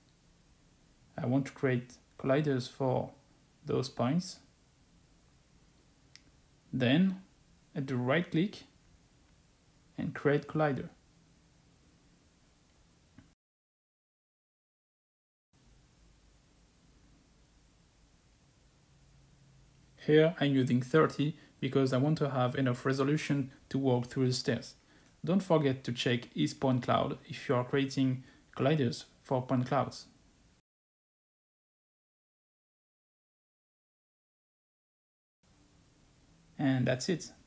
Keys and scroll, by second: 19.0-19.6 typing.